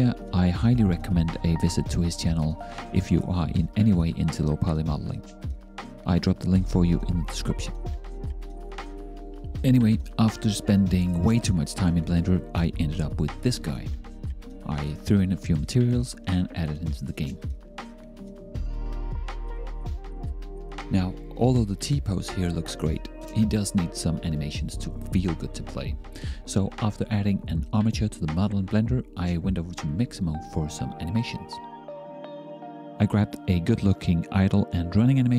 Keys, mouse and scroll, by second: 0.7 e, 1.4 middle click.